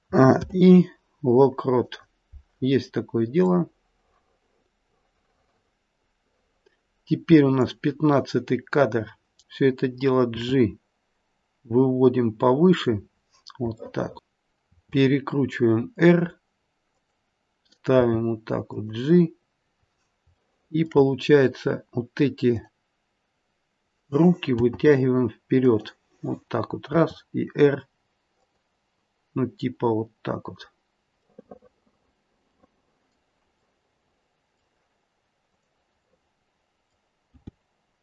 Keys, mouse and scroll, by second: 0.0 a, 0.3 i, 3.4 click, 10.3 g, 13.1 scroll down 2, 13.9 shift+middle click, 14.6 r, 17.9 g, 20.4 shift+middle click, 21.0-22.4 scroll up 1, 22.4 click, 22.4-23.4 scroll up 2, 24.5 g, 26.9 r, 31.3 middle click, 32.8 middle click, 33.8 middle click, 35.4 click, 36.1 middle click, 37.3 g.